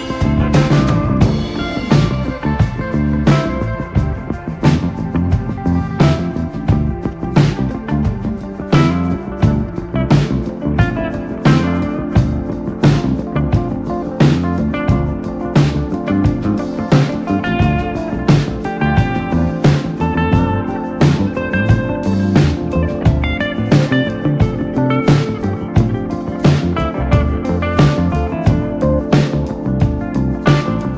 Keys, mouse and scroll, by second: 0.1 g, 1.6 r, 2.8-3.3 scroll up 1, 3.3-3.7 shift+middle drag, 3.7 click, 5.2-5.5 shift+middle drag, 5.5-5.9 drag, 6.4 g, 6.9 click, 7.1 g, 7.7 click, 7.8 scroll down 2, 8.0-8.9 middle drag, 8.9 drag, 9.1 shift+drag, 9.4 shift+click, 9.6 KP_7, 9.8 scroll up 2, 10.2 click, 10.6 click, 11.0 click, 13.9 scroll up 4, 14.2 click, 14.5 shift+middle click, 14.9 g, 15.5 click, 16.5 scroll down 1, 16.7-17.0 shift+middle drag, 17.0 click, 17.4-18.4 drag, 18.4 click, 18.6 scroll down 1, 18.7-19.7 middle drag, 20.2 click, 20.6 click, 21.0 KP_3, 21.4 KP_1, 21.7 scroll up 1, 21.8-22.2 shift+middle drag, 22.2 Tab, 23.8-24.8 drag, 24.9 shift+middle click, 25.3 Tab, 25.6 scroll up 1, 25.8 shift+middle click, 26.6 click, 27.2 click, 30.0 r.